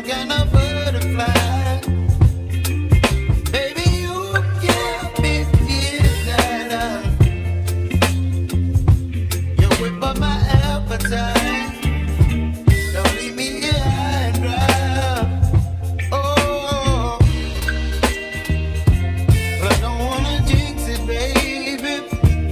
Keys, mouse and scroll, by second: 2.6-7.5 shift+middle drag, 7.5-8.5 drag, 13.2 Tab, 15.2 a, 19.7-22.5 shift+middle drag.